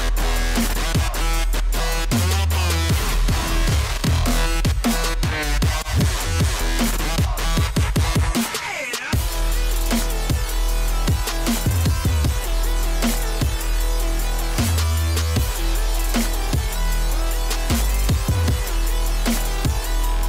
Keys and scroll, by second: 3.7-4.6 typing, 12.0 j, 19.8 h.